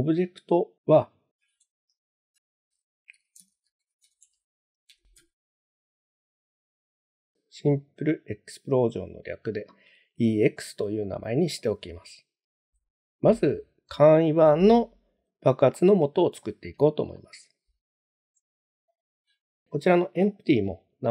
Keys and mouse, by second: 1.3 F2, 10.3-10.6 shift+middle drag, 11.1-11.6 middle drag, 15.7 middle drag, 16.4 shift+middle drag, 17.1-17.5 middle drag, 18.9 click.